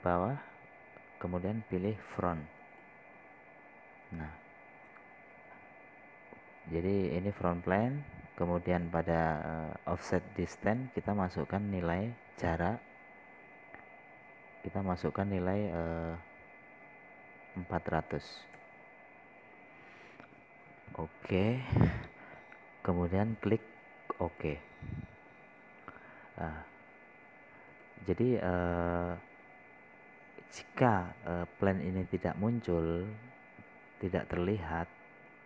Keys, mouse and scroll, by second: 19.0 KP_4, 19.3 KP_0, 21.9 KP_0, 25.6-35.4 drag.